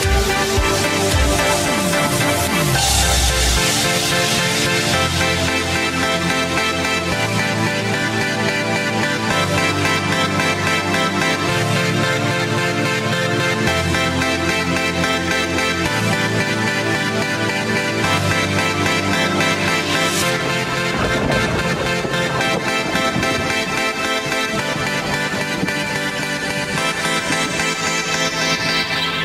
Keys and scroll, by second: 17.2 BackSpace, 18.3 Left, 21.3 g, 24.3 g, 26.2 g, 28.3 w.